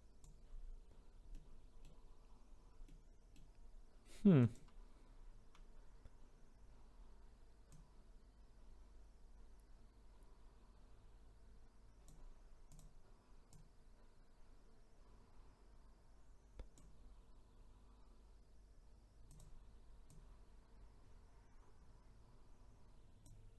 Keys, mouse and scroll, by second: 0.8-1.3 scroll down 2, 1.3-2.4 middle drag, 2.4-2.8 scroll down 1, 2.8-4.3 middle drag, 4.3 click, 5.1 scroll up 2, 7.7 click, 12.7-13.6 drag, 19.3 click, 20.0 click.